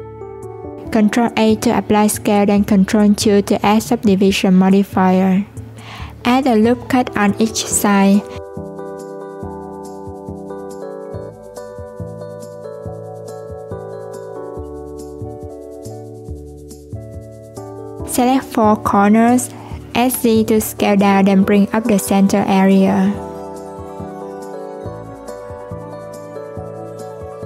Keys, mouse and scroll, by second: 1.9 ctrl+a, 3.4 ctrl+2, 3.8 Tab, 6.2 ctrl+r, 13.6 s, 15.3 Tab, 16.5 click, 17.2 1, 17.8 alt+z, 18.1 click, 18.9 shift+click, 19.5 shift+click, 20.1 shift+click, 20.8 middle click, 21.6 s, 27.1 click.